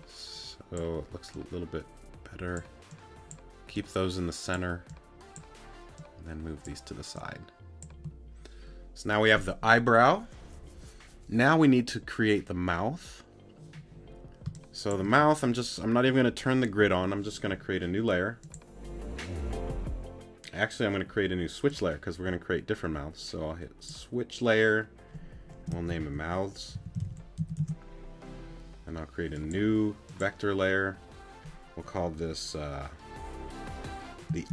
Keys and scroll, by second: 14.4 space.